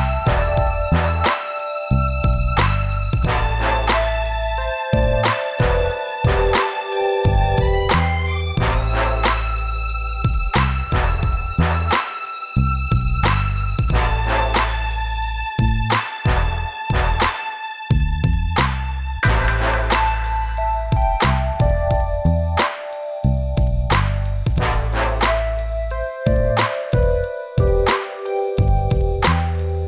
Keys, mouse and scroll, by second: 0.1 scroll up 2, 1.1 click, 4.9 scroll down 1, 5.5 click, 5.5 click, 6.6 scroll down 1, 7.1 scroll down 1, 9.1 scroll up 2, 10.6 scroll down 2, 11.6 p, 14.9 scroll up 2, 15.6 scroll up 1, 20.9 typing, 22.4 scroll up 1, 23.8 click, 24.7 click, 24.8 click, 26.1 click, 26.2 click, 27.1 scroll up 2, 27.9 middle click.